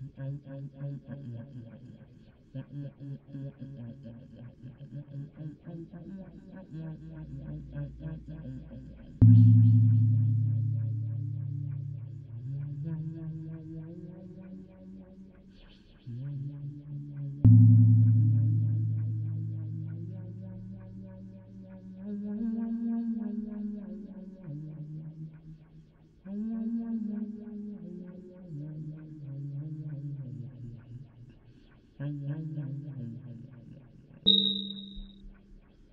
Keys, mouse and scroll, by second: 0.4-2.0 middle drag, 2.0-13.7 typing, 2.1 click, 6.6 middle click, 16.7-20.1 typing, 18.2 click, 21.2 d, 21.9 a, 22.0 a, 23.9-29.2 d, 24.1-28.8 drag, 28.8 middle click, 28.9 click, 29.8 d, 31.7 d, 32.6 click, 32.9 click.